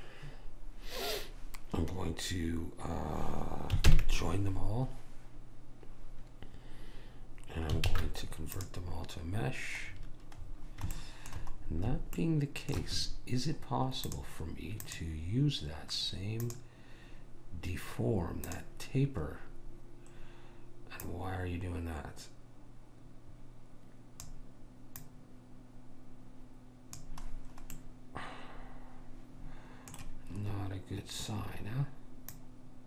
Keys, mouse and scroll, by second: 4.0 ctrl+j, 8.0 alt+c, 14.2-16.8 drag, 18.6 click, 19.8-22.4 middle drag, 25.2 click, 27.6-29.8 middle drag, 32.5 click.